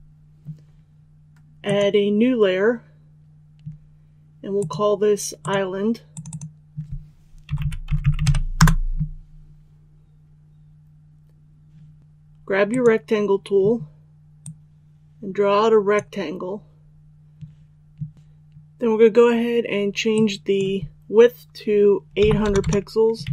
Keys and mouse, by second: 7.4-8.2 typing, 8.5 Return, 12.0 ctrl+z, 12.6-16.4 drag, 22.1 KP_8, 23.2 Tab.